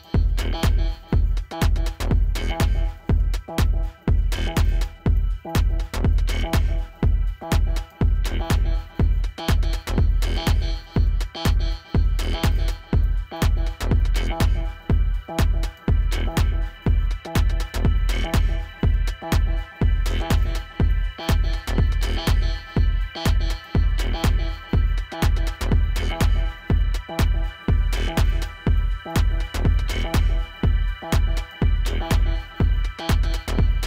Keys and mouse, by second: 2.3 click, 8.1 Tab, 9.1 click, 9.7 v, 10.2 a, 10.9 click, 13.5 ctrl+-, 13.6 typing, 14.4 ctrl+t, 15.1 typing, 16.3 alt+click, 16.8 click, 17.3 Return, 17.5 =, 18.1 ctrl+0, 19.0 -, 19.2 click.